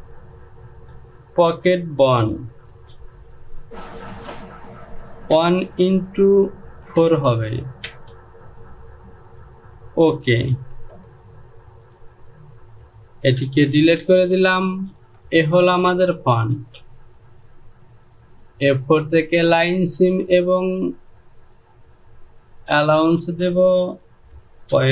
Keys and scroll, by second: 1.4 space, 3.2-4.6 typing, 5.9-6.4 typing, 7.5 KP_4, 8.4 Return, 11.2 j, 14.7 shift+z, 17.0 Home.